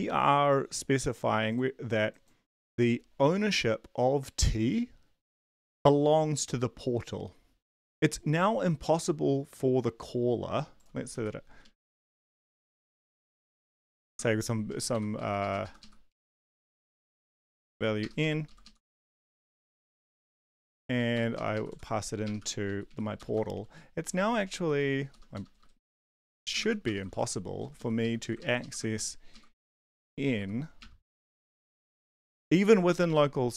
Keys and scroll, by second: 11.1 Page_Down, 11.5 Up, 11.6 Up, 11.8 Up, 12.3 Return, 12.3-14.1 typing, 14.7 Down, 14.9 End, 15.2 Left, 15.4 Left, 16.1 ctrl+shift+Right, 16.8-18.2 typing, 18.4 ctrl+Left, 18.6 ctrl+Left, 19.0 ctrl+Right, 19.8 Left, 20.3-27.2 typing, 20.3 End, 20.5 Up, 20.6 Down, 21.1 End, 21.4 Left, 22.6 shift+Right, 23.2 Return, 23.6 Up, 24.1 Tab, 25.3 Return, 26.3 Return, 26.6 shift+Home, 27.6 Down, 27.8 Down, 28.0 Left, 28.2 Left, 28.6 Left, 29.3 ctrl+shift+Left, 29.5 Delete, 29.9 b, 30.4 Delete, 31.1 typing, 31.3 Right, 31.4 Right, 31.7 ctrl+s.